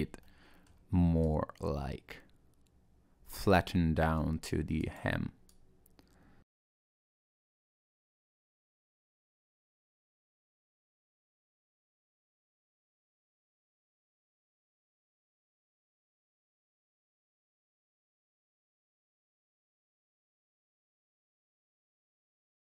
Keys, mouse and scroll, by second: 0.1 scroll up 1, 0.3 middle click, 1.2 click, 3.8 middle click, 4.8 click, 5.5 click, 6.5 ctrl+z, 6.6 click, 6.7 click, 6.8 middle click, 6.8 scroll down 1, 6.9 scroll up 1, 7.1 g, 8.4 click, 8.5-12.0 typing, 8.9 click, 9.2 middle click, 9.5 click, 9.6 middle click, 9.7 click, 10.1 click, 10.3 middle click, 10.5 click, 10.9 middle click, 11.1 click, 11.3 middle click, 11.5 click, 11.7 middle click, 11.8 middle click, 11.9 click, 12.2 middle click, 12.5 middle click, 12.8 click, 13.0 click, 13.1 middle click, 13.5 middle click, 14.2 click, 14.6 middle click, 14.9-22.7 typing, 15.2 click, 15.4 middle click, 15.6 click, 15.8 middle click, 16.0 click, 16.3 middle click, 16.4 click, 16.7 middle click, 16.8 middle click, 17.0 middle click, 17.3 middle click, 17.8 click, 18.1 middle click, 18.3 click, 18.7 middle click, 18.8 click, 19.1 middle click, 19.3 scroll down 1, 19.6 click, 19.9 middle click, 20.1 click, 20.4 middle click, 20.5 click, 20.7 middle click, 21.1 click, 21.4 click, 21.6 middle click, 21.8 click, 22.3 click, 22.5 middle click.